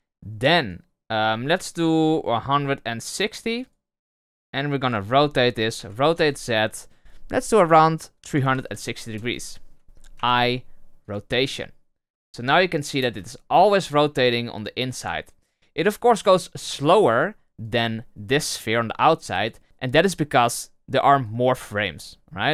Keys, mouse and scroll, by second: 0.7-5.7 drag, 5.7 r, 10.1 i, 12.6-13.0 drag, 13.0 space, 16.3 space, 17.6 right click, 21.3-22.5 drag.